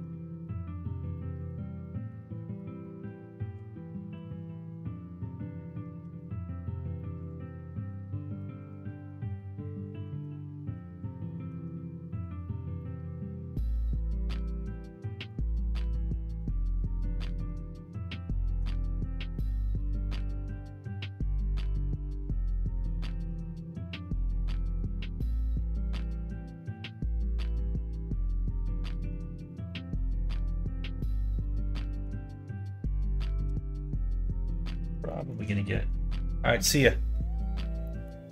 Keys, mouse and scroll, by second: 1.8 click, 2.8-4.2 drag, 4.4 click, 6.0 g, 7.4 middle click, 8.6 click, 9.8 shift+click, 10.2 middle click, 11.1 shift+middle click, 11.7 middle click, 12.0 click, 12.3 middle click, 13.2 middle click, 13.8 middle click, 14.2 shift+middle click, 15.2 click, 15.8 click, 16.3 middle click, 17.1 middle click, 18.2 shift+middle click, 19.3 click, 19.6-22.8 middle drag, 23.5 middle click, 24.7 shift+middle click, 25.5 middle click, 27.1 middle click, 28.0 middle click, 29.4 click, 29.6 middle click, 30.5 shift+click, 30.9 middle click, 32.4 middle click, 32.9 middle click, 33.3 shift+middle click, 34.1 click, 35.0 shift+middle click, 37.8 shift+middle click.